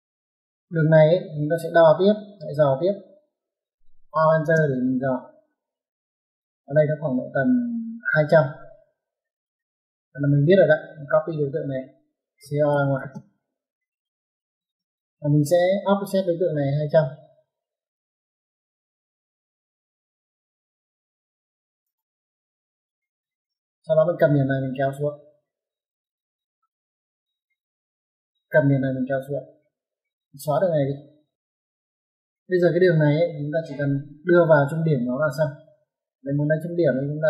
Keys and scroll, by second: 2.1 Escape, 4.0-4.3 typing, 8.5 Escape, 12.3-12.9 typing, 14.5 space, 18.3 o, 20.0-21.7 typing, 23.4 Escape, 29.6 Escape, 31.2 typing.